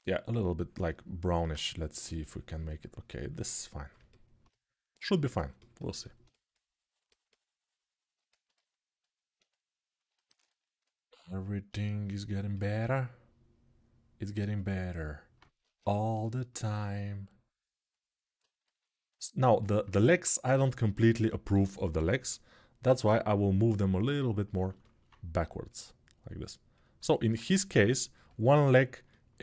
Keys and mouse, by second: 0.0-7.9 middle drag, 0.5-7.9 drag, 1.2 alt+q, 7.9-12.6 alt+right drag, 12.6-29.4 alt+drag, 15.4 ctrl+Tab, 19.8 ctrl+Tab, 21.3 g, 21.7-22.6 ].